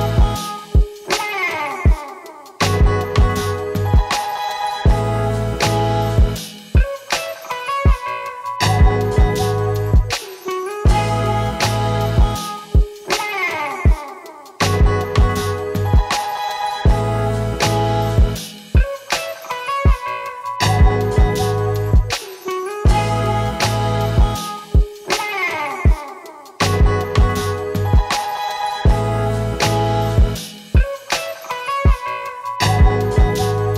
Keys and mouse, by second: 1.7 Tab, 2.0 Tab, 4.1 shift+a, 6.2 ctrl+z, 6.3 ctrl+z, 8.2 shift+a, 9.7 click, 11.8-12.8 drag, 13.4-13.7 drag, 14.4 click, 16.2 Left, 16.3 Left, 16.4 Left, 16.7 BackSpace, 17.1-21.8 drag, 17.1-18.3 middle drag, 17.1-18.3 right drag, 17.1 e, 20.9 Tab, 21.0 alt+a, 21.2 3, 21.3 l, 21.6 alt+middle click, 21.6 right click, 22.6 Tab, 23.5-24.9 shift+drag, 24.0 ctrl+l, 24.5 Tab, 24.9 alt+a, 25.2 alt+a, 25.5 l, 26.0-27.1 alt+drag, 27.2 Tab, 27.6 alt+a, 27.8 drag, 28.1-29.3 ctrl+middle drag, 29.2 alt+a, 29.3-31.1 drag, 29.7 shift+a, 31.1 middle click, 31.7 shift+a, 32.1-32.5 drag, 32.1-32.5 right drag, 32.6 ctrl+c, 32.8 click, 32.8 right click, 33.1 ctrl+v, 33.4-33.7 drag, 33.4-33.7 right drag.